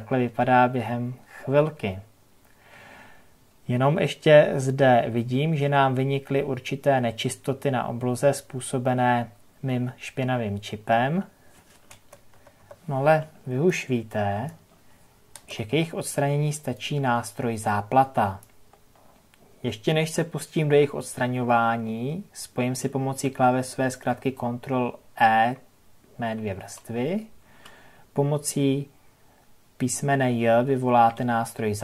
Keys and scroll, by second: 11.9 ctrl+KP_Add, 26.5 ctrl+e.